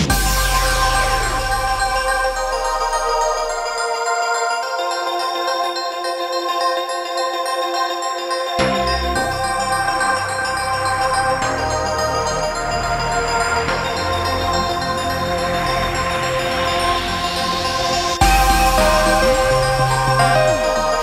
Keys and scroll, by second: 0.5-1.9 typing, 2.9-3.7 typing, 7.2-7.9 typing, 17.3-18.0 typing, 20.6 Return.